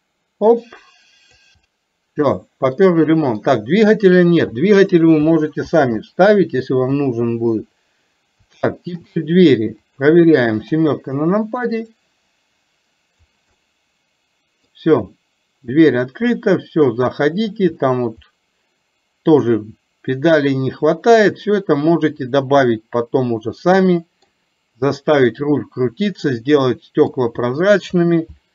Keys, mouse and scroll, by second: 0.1-1.4 drag, 1.7-3.6 middle drag, 6.9 KP_3, 8.8 shift+middle click, 10.1 click, 10.7 KP_7, 11.9-13.4 drag, 13.7-14.8 middle drag, 15.1-17.4 middle drag, 18.4-24.3 middle drag, 26.3-27.3 middle drag.